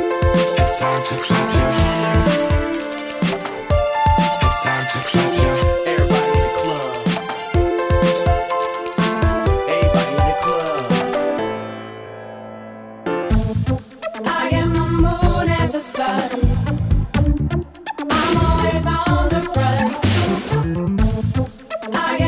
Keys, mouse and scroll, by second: 0.0-5.0 typing, 6.5-7.2 typing, 10.2 click, 13.3 click, 16.2 click, 17.4 click, 20.6 click, 22.2 click.